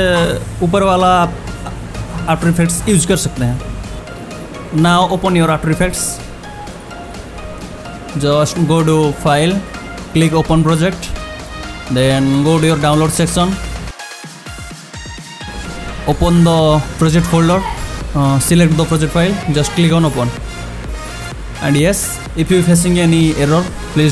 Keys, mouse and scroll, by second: 6.7 click, 9.2 click, 13.9-15.4 scroll down 1, 15.4 click, 18.8 click.